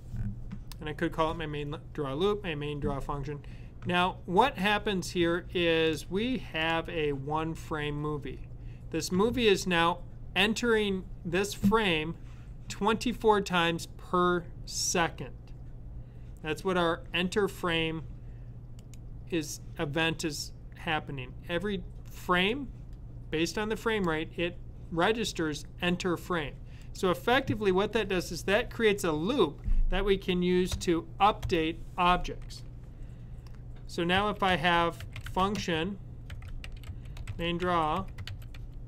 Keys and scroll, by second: 33.8-38.8 typing.